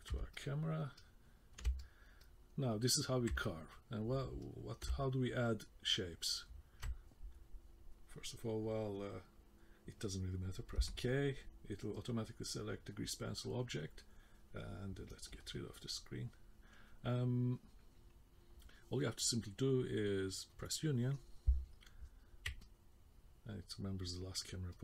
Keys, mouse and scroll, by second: 0.3 ctrl+middle click, 1.0 ctrl+middle click, 1.8 middle click, 2.2 middle click, 3.4 ctrl+middle click, 4.4 middle click, 5.1 middle click, 10.8 k, 20.5 click, 22.6 middle click, 24.7 middle click.